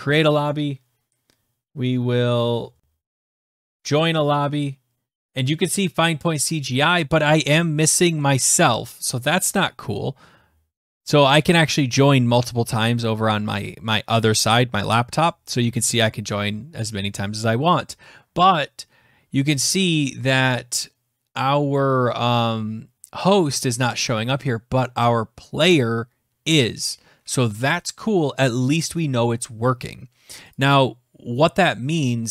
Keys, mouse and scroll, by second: 25.5 click, 30.3 click.